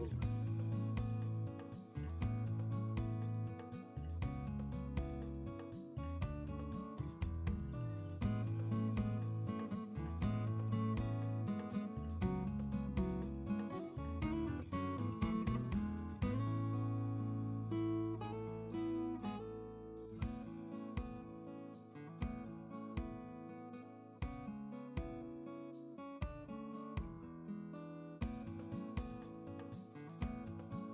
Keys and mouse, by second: 0.2 click, 0.4 Tab, 6.4 Tab, 9.5 ctrl+alt+z, 10.1 KP_Divide.